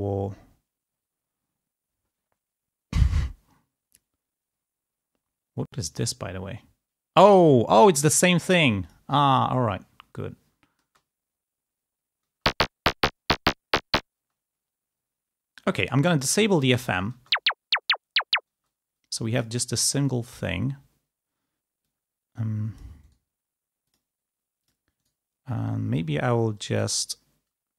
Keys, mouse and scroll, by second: 5.9 click, 8.7 click, 10.7 space, 12.2 space, 14.1 space, 16.3 click, 17.0 space, 18.4 space, 21.7-22.8 drag, 22.9 right click, 23.7 click, 24.5 click, 24.9 right click, 26.4 click, 26.7 right click.